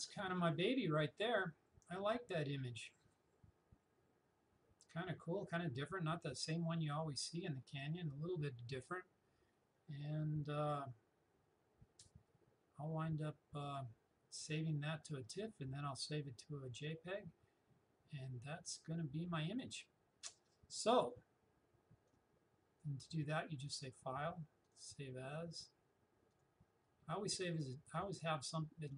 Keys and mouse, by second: 22.1-23.7 drag.